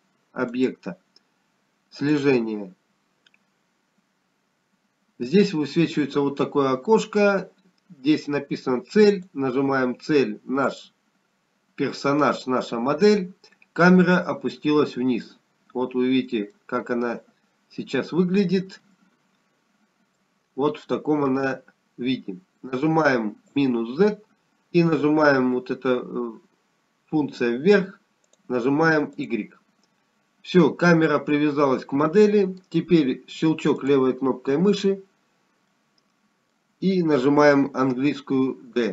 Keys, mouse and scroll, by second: 3.7 click, 7.1-7.7 scroll down 2, 12.0 click, 18.1 middle click, 21.5-25.5 scroll up 3, 31.5 click, 33.4-35.6 scroll down 2, 35.9 middle click, 38.4 click.